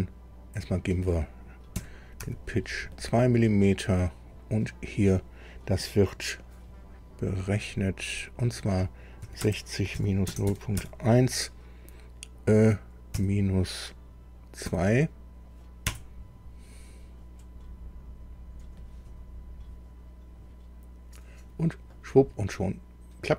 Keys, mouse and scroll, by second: 0.6 click, 1.7 KP_2, 2.2 Tab, 4.0 click, 8.1 click, 9.2-10.7 typing, 9.9 KP_Subtract, 13.1 KP_Subtract, 14.6 KP_2, 15.9 KP_Enter, 21.9 middle click.